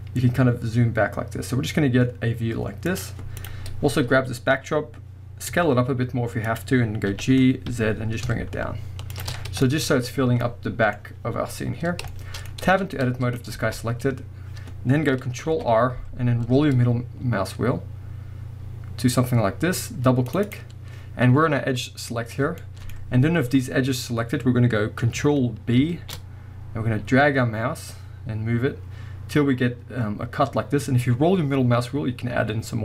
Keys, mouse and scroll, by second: 3.4 click, 3.6-4.2 scroll down 1, 4.2-5.5 scroll up 1, 5.5 s, 6.6 click, 7.1 g, 9.2 shift+click, 9.4-10.1 scroll down 2, 9.7-12.9 middle drag, 11.0-11.4 scroll up 1, 12.5 scroll up 1, 12.7 Tab, 13.6 alt+a, 15.4 ctrl+r, 20.6-22.6 drag, 23.0-32.8 middle drag, 23.0-24.9 scroll up 1, 25.8 ctrl+b.